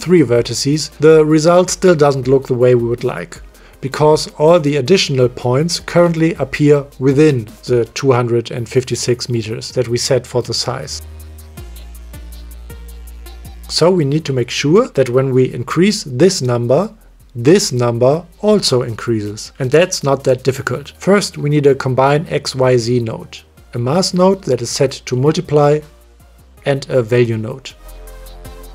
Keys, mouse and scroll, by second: 2.4-4.3 middle drag, 5.2 middle click, 6.3 click, 7.0 m, 10.1 click, 13.9 m, 14.1 middle click, 19.7 click, 19.7 middle click, 21.5 click, 22.0 shift+a, 23.9 shift+a, 25.7 click, 25.9-26.3 drag, 27.4 shift+a.